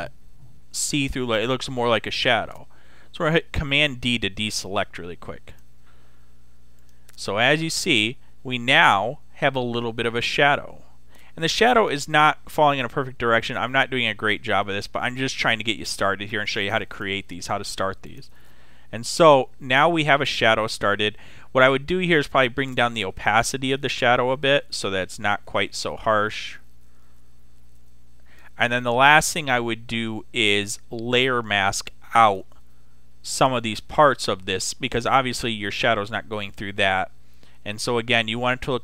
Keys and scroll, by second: 3.7 super+d.